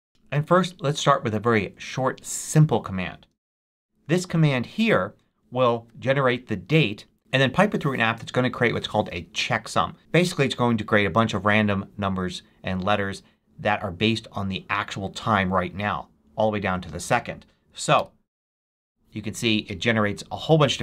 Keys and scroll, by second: 3.6 super+v, 17.9 Return.